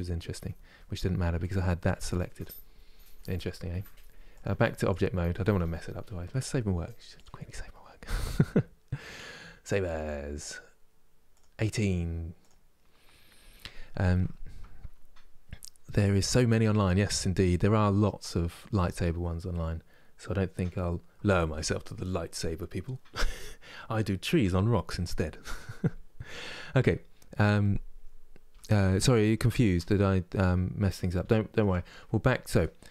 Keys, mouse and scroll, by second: 1.1-12.3 drag, 19.8-20.2 scroll up 2, 28.5-32.9 shift+middle drag.